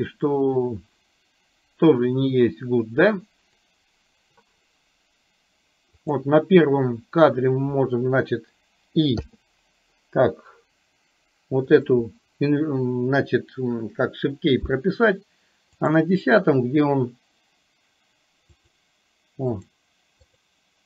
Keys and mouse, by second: 3.6 click, 6.2 drag, 9.2 i, 11.7 click, 16.0 click, 18.7 click, 19.7 click, 20.5 click.